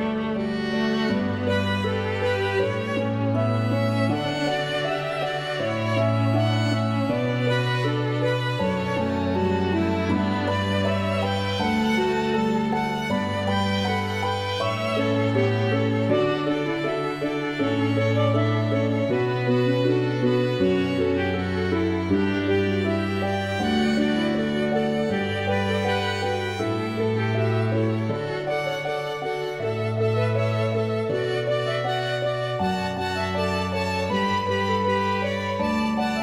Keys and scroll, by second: 1.5 0, 2.0 Return, 6.9 f.